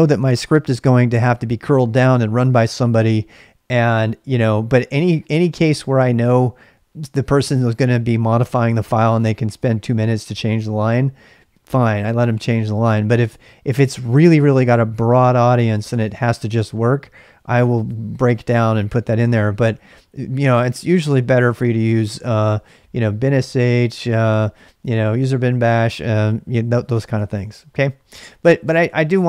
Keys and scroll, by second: 19.2 Return, 19.8 ctrl+[, 19.9 k, 20.6 ctrl+[, 20.8 l, 21.9 l, 22.1 l, 22.3 l, 27.2 ctrl+[, 27.3 ctrl+j, 27.5-29.2 typing.